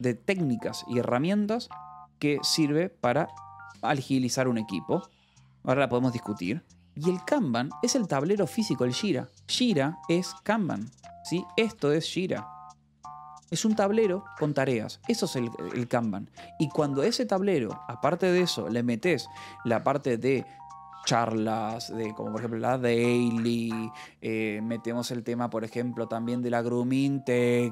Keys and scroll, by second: 3.1 b, 6.5 Escape, 6.8 j, 7.6 e, 9.7 Escape, 10.0 a, 10.2 space, 10.9 j, 11.3 i, 11.7 Escape, 13.1-14.1 typing, 14.2 Escape.